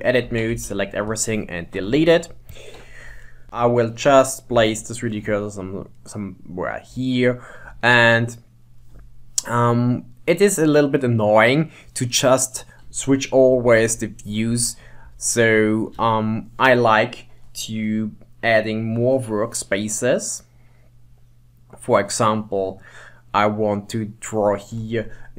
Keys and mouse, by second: 0.4 a, 0.6 x, 2.0 ctrl+Tab, 3.6 KP_1, 3.8 shift+right click, 5.0 shift+right click, 8.0-9.2 shift+middle drag, 11.0 middle click, 13.9 KP_3, 14.6 KP_7, 16.1 KP_1, 18.5-21.6 drag.